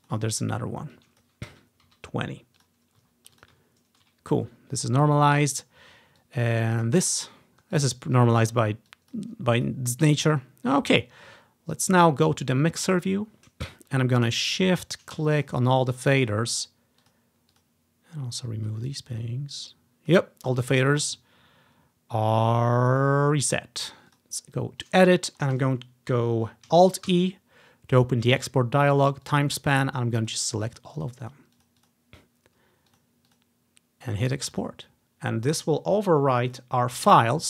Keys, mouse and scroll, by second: 0.0 click, 1.0 click, 1.6-2.0 typing, 2.7 click, 3.1 ctrl+click, 5.2-5.7 ctrl+scroll up 2, 6.3-7.8 ctrl+drag, 6.7 ctrl+scroll up 1, 8.2 scroll up 3, 8.7-10.4 drag, 12.9 click, 15.5 click, 17.1-18.8 drag, 19.0-20.6 drag, 24.2-25.8 drag, 27.2 alt+e, 29.3 click, 30.3 click, 30.8 click, 31.1 click, 31.3 click, 31.6 click, 31.9-35.8 drag, 36.6 click.